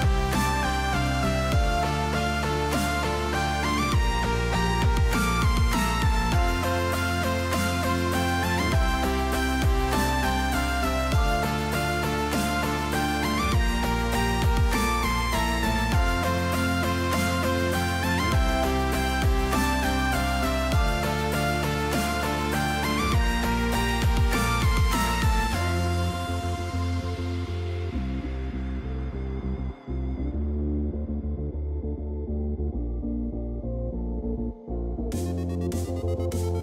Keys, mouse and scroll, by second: 2.0 click, 3.2 click, 5.5 middle drag, 7.2-10.2 drag, 10.6 shift+middle drag, 11.1 shift+middle click, 11.6 middle click, 13.8-16.0 drag, 13.8-16.0 right drag, 16.3 click, 16.3 right click, 19.4-22.7 drag, 19.4-22.7 right drag, 24.2 KP_0, 25.2 right click, 27.7 shift+middle drag, 28.3 shift+middle click, 32.5 click, 33.2 shift+middle drag, 33.9 shift+click, 34.7 click, 35.4 click, 36.5-36.6 drag.